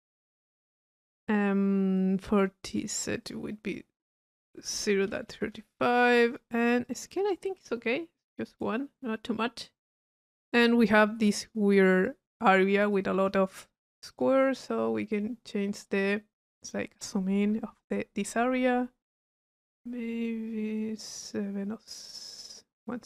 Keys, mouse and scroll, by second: 3.2 click, 4.0 click, 6.9 click, 11.3 click, 12.9-13.3 drag, 14.1 click, 14.7 click, 15.6-18.0 middle drag, 20.8-23.0 middle drag.